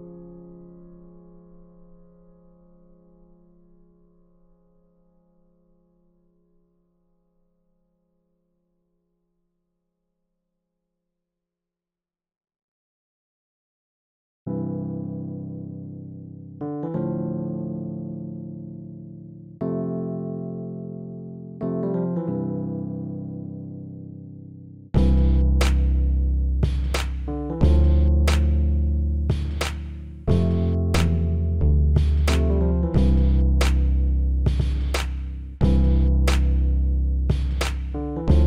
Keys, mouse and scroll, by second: 1.1-2.8 drag, 3.1 KP_3, 4.3-6.1 drag, 8.8-10.8 middle drag, 12.6-15.9 drag, 17.1-18.9 drag, 20.1-23.3 middle drag, 23.3-26.3 drag, 24.6 right click, 26.9 s, 31.5-34.7 middle drag, 35.0-38.4 middle drag.